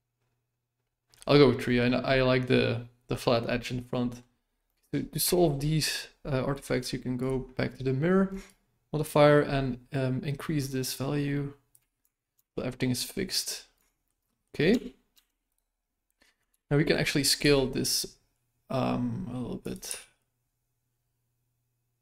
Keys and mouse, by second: 3.8-4.2 middle drag, 4.6 middle drag, 5.3 shift+middle click, 8.5-11.7 shift+drag, 12.0 Tab, 12.3 Tab, 12.6-13.3 middle drag, 13.8 shift+middle drag, 14.2 middle click, 14.7 Tab, 15.1 Tab, 15.5 right click, 16.5 KP_1, 17.4 s, 19.8 g.